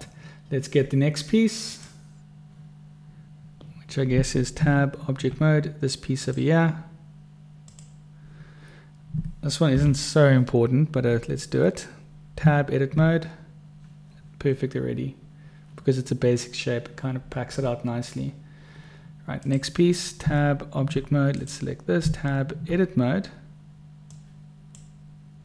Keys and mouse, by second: 2.0 click, 4.9 Tab, 6.5 click, 8.1 click, 10.1 u, 12.8 Tab, 19.7 click, 20.6 Tab, 22.4 Tab, 24.4 click.